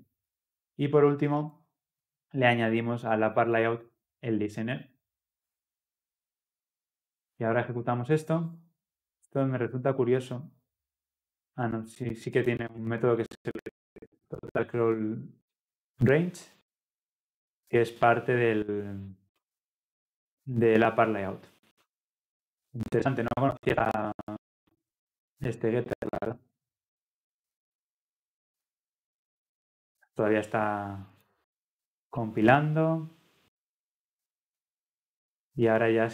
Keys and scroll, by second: 7.3 ctrl+F10, 13.6 ctrl+b, 21.8 ctrl+alt+Left.